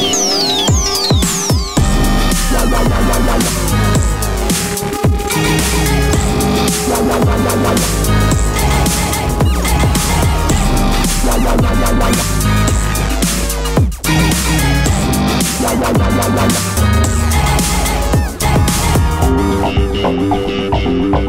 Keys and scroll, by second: 2.9 super+d, 6.6 super+d, 7.1 super+d, 7.6 super+d, 10.4 super+d.